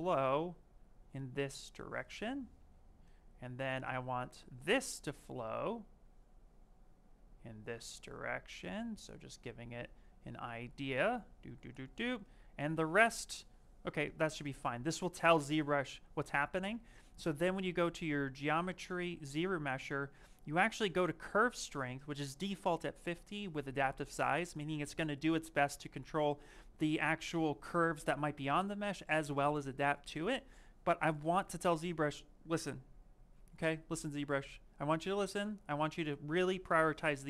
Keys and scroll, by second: 2.4 Escape.